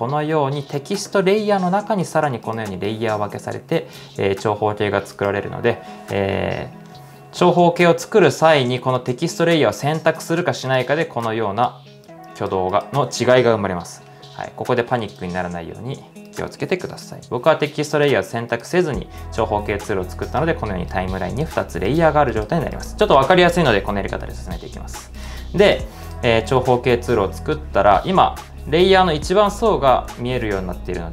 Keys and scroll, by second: 16.6-17.4 typing, 25.8 typing.